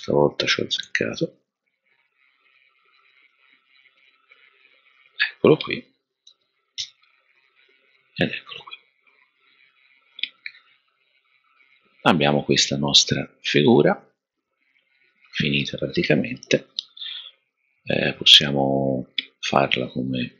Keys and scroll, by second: 0.8 h, 6.2 super+d, 6.8 v, 9.8 v, 19.8 super++.